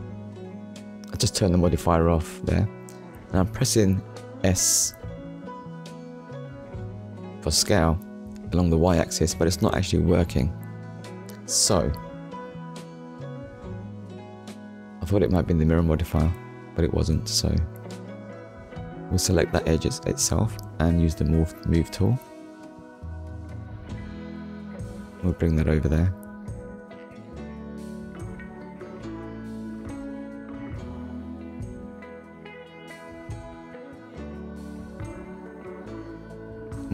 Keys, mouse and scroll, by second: 0.2 click, 1.0-1.9 scroll down 3, 1.9 shift+middle click, 5.8 right click, 9.6 right click, 15.2 click, 15.9 click, 16.3 scroll up 1, 17.3 click, 17.9 shift+click, 18.7 shift+middle click, 19.8 shift+click, 21.0 click, 22.0 click, 28.3 click, 29.9 scroll down 1, 30.5 shift+middle click, 32.4 shift+middle click, 34.0-34.4 scroll up 1, 35.5 middle click, 36.5 click.